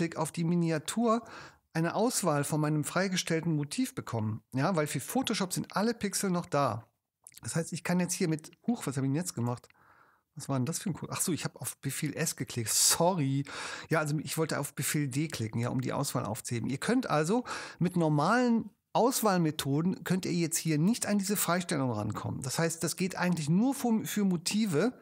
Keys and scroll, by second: 7.5 super+s, 14.8 super+d.